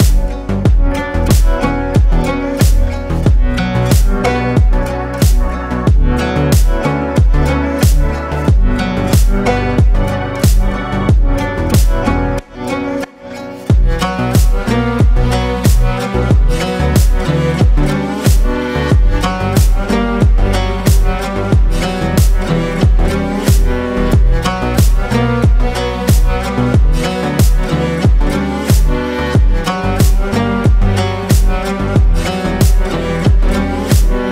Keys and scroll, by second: 1.2 ctrl+shift+space, 3.1 ctrl+shift+space, 9.1 ctrl+shift+space, 15.7 ctrl+space, 16.7 ctrl+space, 19.8 ctrl+space, 20.7 ctrl+space, 21.5 ctrl+space, 24.4 Up, 29.9 ctrl+space.